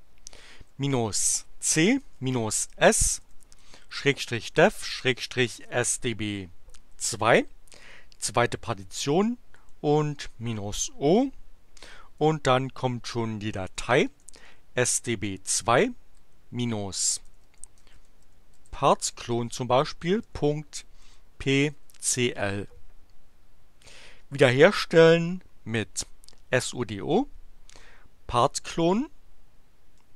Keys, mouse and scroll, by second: 0.3-6.2 typing, 8.8 space, 9.1 -, 9.6 o, 12.3-15.0 typing, 16.2-19.2 typing, 20.2-22.4 typing, 28.3 BackSpace.